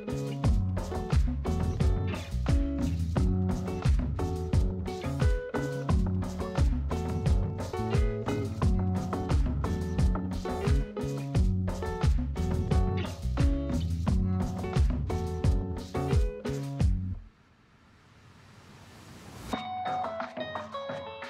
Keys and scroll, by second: 14.4 ctrl+=, 15.8 space.